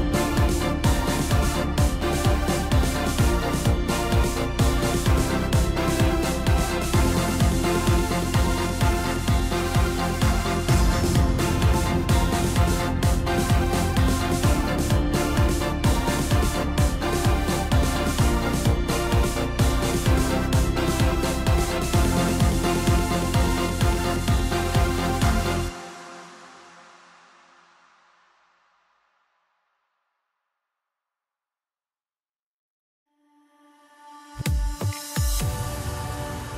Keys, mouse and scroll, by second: 0.2 3, 0.4 click, 1.2 KP_1, 2.0 g, 3.5 s, 5.1 ctrl+r, 8.6 Tab, 8.9 scroll down 2, 9.1-10.3 middle drag, 10.3 click, 10.9-11.6 right drag, 11.6-12.9 middle drag, 12.9 KP_1, 13.9 KP_Divide, 14.9-15.3 scroll down 3, 15.3 s, 17.0 s, 17.7-18.3 scroll up 3, 18.3 g, 20.3 s, 21.6 g, 24.8-25.8 scroll up 2, 25.8 g, 28.2 ctrl+a, 29.8-30.7 scroll down 1, 32.3-33.9 drag, 34.1 scroll up 2, 34.3 scroll down 2, 34.6-36.3 middle drag, 36.3 KP_1.